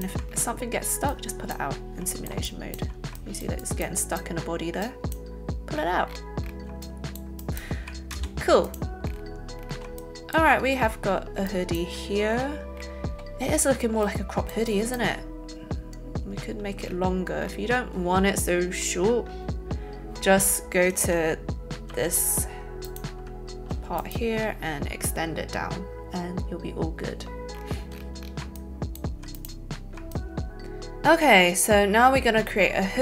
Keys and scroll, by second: 8.0 alt+space, 21.9 z.